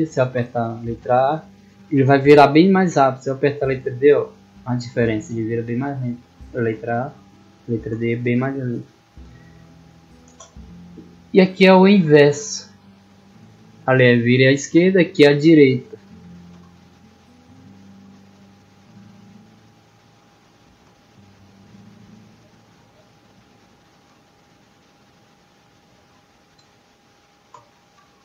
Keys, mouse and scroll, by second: 0.3 a, 1.8 a, 2.8 d, 4.3 d, 6.0 a, 7.1 d, 10.8 middle click, 13.7 click, 16.6 d, 18.1 a, 19.5 d, 21.8 d, 23.0 a, 24.2 d, 26.5 d.